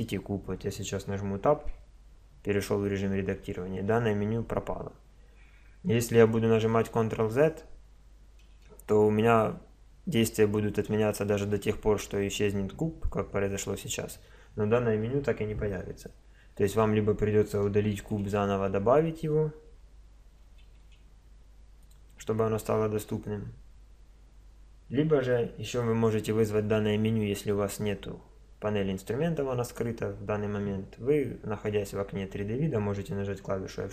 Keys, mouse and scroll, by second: 1.7 Tab, 6.6 ctrl+z, 18.0 shift+a, 19.7 Tab, 20.6 shift+a, 33.8 F6.